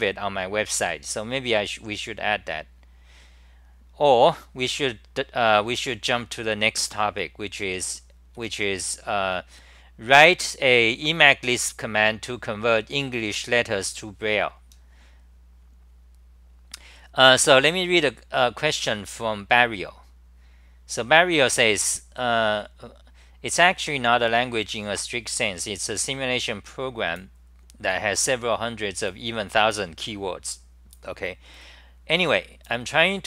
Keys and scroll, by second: 6.6-9.5 typing, 12.5 r, 12.6 r.